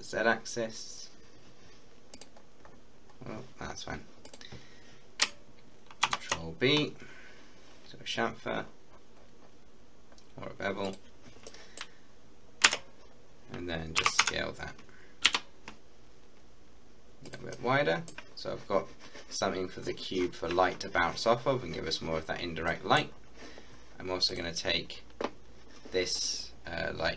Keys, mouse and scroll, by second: 0.7 typing, 2.2 click, 2.4-2.7 scroll down 1, 3.1-3.6 scroll up 1, 3.7-4.2 scroll up 1, 4.3 click, 6.1 ctrl+b, 8.6-9.5 scroll up 1, 10.8 click, 11.4 middle click, 12.7 Tab, 14.0 s, 14.3 x, 15.3 y, 17.3 click, 17.6 middle click, 18.4-19.5 scroll up 1, 19.5 scroll down 1, 22.3-24.4 scroll down 4, 22.7 middle click, 24.4 click.